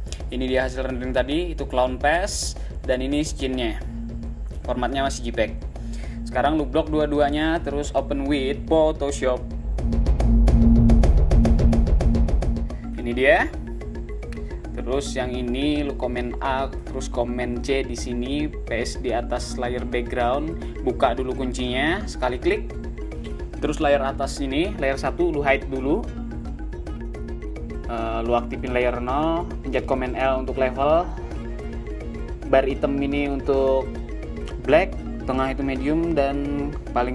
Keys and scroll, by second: 0.0 space, 1.8 space, 3.1 space, 5.0 space, 14.3 super+a, 15.7 super+c, 18.3 super+v, 29.0 super+l.